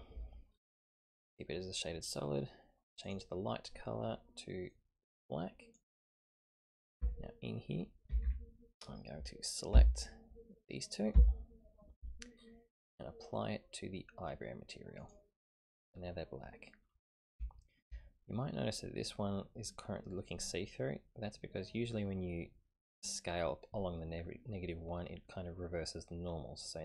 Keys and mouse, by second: 3.0-4.2 drag, 6.5 click, 7.0 Tab, 8.1 a, 8.3 a, 9.7 l, 11.1 l, 15.0 click, 17.5 shift+middle click, 19.9-21.7 middle drag, 25.8-26.6 middle drag.